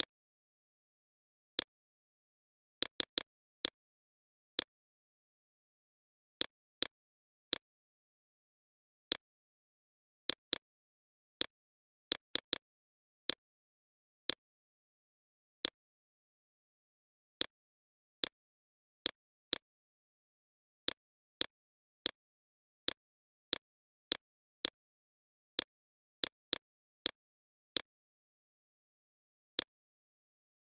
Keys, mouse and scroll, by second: 1.5 right click, 2.0-7.0 drag, 7.0 right click, 7.4 click, 9.5 shift+click, 9.9 click, 10.3 right click, 10.8-12.6 drag, 12.6 right click, 13.1 click, 16.4-18.2 drag, 18.8-30.6 alt+shift+drag.